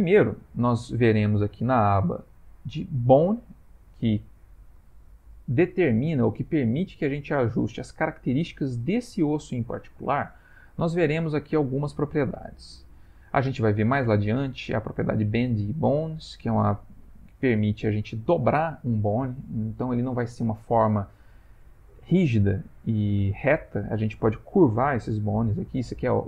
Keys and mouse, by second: 3.8 click, 14.2 click, 15.9 click.